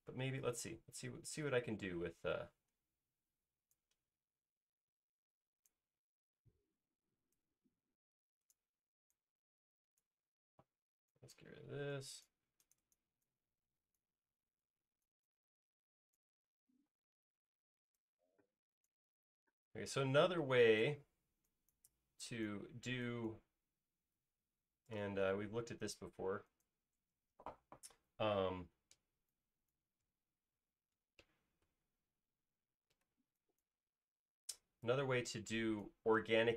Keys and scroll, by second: 0.9 p, 2.6 typing, 8.6 Escape, 10.5 e, 17.1 p, 19.2-20.0 typing, 27.6 e, 29.0 space, 29.5 space, 30.3 e, 31.3 space, 31.9 e.